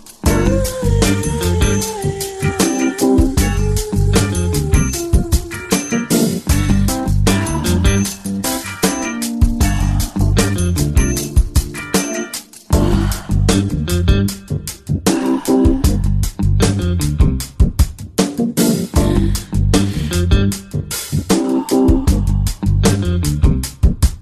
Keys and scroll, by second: 12.6 ctrl+space, 13.1 ctrl+space.